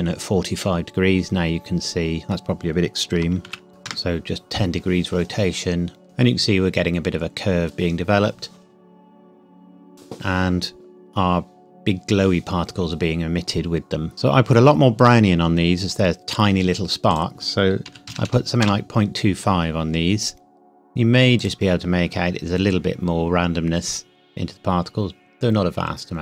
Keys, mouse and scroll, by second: 0.5 middle click, 3.4 ctrl+z, 3.7 KP_0, 3.8 KP_Enter, 13.5-13.9 scroll up 1, 17.1 click, 17.8 KP_Decimal, 18.0 KP_2, 18.4 KP_5, 18.6 KP_Enter, 21.3 click.